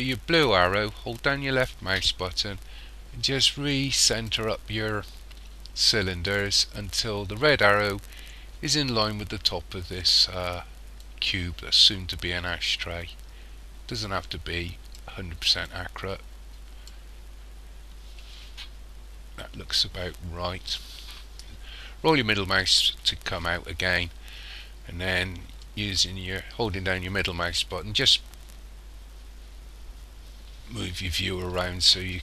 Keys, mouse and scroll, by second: 1.2 click, 11.1 click, 15.7 click, 18.4-18.9 scroll up 3, 20.4-21.0 scroll down 6, 21.6-22.1 scroll down 3, 25.7 middle click.